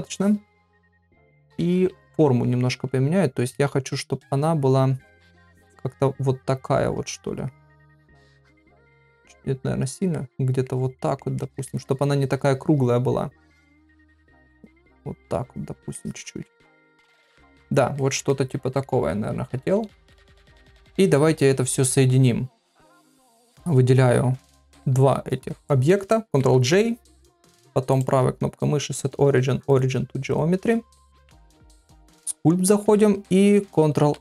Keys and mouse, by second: 1.5 ], 1.6 ], 3.6 middle click, 4.8 click, 5.4 click, 6.0 click, 6.7 click, 7.2 click, 7.6 middle click, 9.3 click, 9.9 click, 10.1 middle click, 11.0 middle click, 11.4 ctrl+middle click, 11.7 middle click, 12.4 click, 13.0 click, 13.8 click, 14.7 click, 15.6 click, 15.9 middle click, 16.7 ctrl+middle click, 17.0 middle click, 18.0 ctrl+middle click, 18.3 middle click, 19.7 ctrl+Tab, 26.3 ctrl+j, 27.9-29.9 right drag, 31.1 ctrl+Tab.